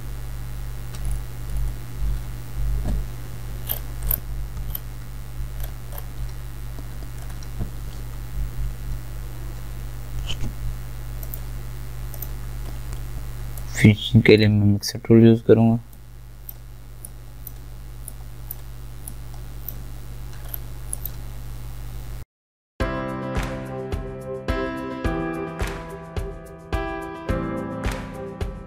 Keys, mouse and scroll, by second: 1.1 alt+scroll down 1, 3.7-4.1 alt+scroll up 1, 5.6-6.1 scroll up 2, 11.2 right click, 12.2 click, 12.2 click, 13.6-16.0 alt+right drag, 16.0-20.5 drag, 20.5 alt+scroll up 1, 21.0 alt+click, 22.7 right click, 22.9 click, 23.0 alt+right click, 23.0 click, 23.2 alt+click, 23.8 alt+right click, 23.9 click, 24.0 scroll down 1, 24.3 alt+click, 24.8 alt+right click, 24.8 click, 26.1 alt+scroll down 1, 26.2 scroll up 1, 26.3 alt+right click, 26.4 click, 27.0 alt+right click, 27.7 alt+scroll down 1, 27.8 alt+scroll up 1, 27.9 click, 28.0 alt+right click, 28.0 click, 28.4 scroll down 1, 28.5 click, 28.6 alt+right click.